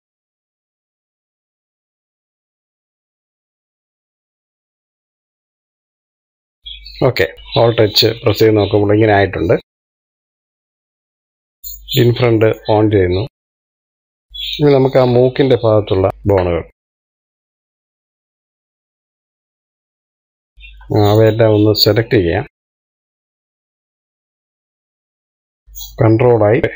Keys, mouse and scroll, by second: 0.6 click, 1.0 click, 2.0 middle click, 2.4 scroll down 1, 2.6 middle click, 3.7 click, 3.8 middle click, 4.3 middle click, 4.6 click, 5.2 shift+click, 6.2 middle click, 6.4 scroll down 3, 6.6 shift+middle click, 7.3 click, 8.0 alt+h, 9.4-10.4 middle drag, 10.4 click, 10.6 middle click, 10.9 click, 11.5-13.4 shift+middle drag, 13.4 click, 13.7 scroll up 1, 13.9-16.1 middle drag, 16.1 KP_3, 16.7 shift+middle click, 17.3 click, 18.3 click, 19.6 middle click, 20.4 scroll up 2, 20.5 middle click, 21.4 click, 22.3 shift+click, 22.7 shift+middle click, 23.0 shift+click, 23.1 middle click, 23.3 shift+click, 23.4 shift+middle click, 23.8 shift+click, 24.2 middle click, 24.7 shift+click, 24.9 middle click, 25.4 shift+click, 26.1 middle click, 26.6 alt+h.